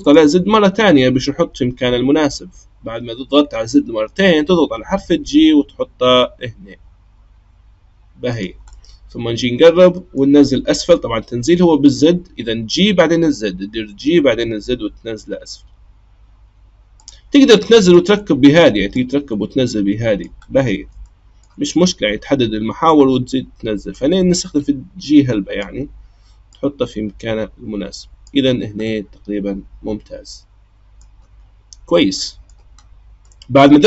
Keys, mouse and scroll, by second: 0.0 click, 4.9 g, 8.7-11.8 middle drag, 13.7 g, 17.8-19.0 drag, 20.4-21.0 scroll up 2, 21.0-21.7 shift+middle drag, 21.7-23.9 scroll up 1, 23.9 click, 26.5 click, 28.8-31.8 middle drag, 31.8-32.2 scroll down 1, 32.2-32.8 middle drag, 32.8-33.2 scroll down 1, 33.2-33.8 middle drag.